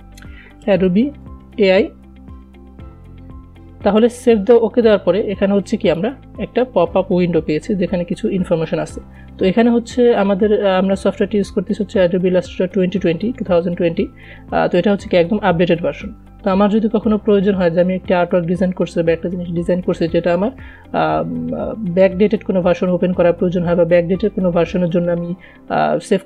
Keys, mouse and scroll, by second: 0.0-1.8 typing, 2.6 Return, 5.1-26.2 drag.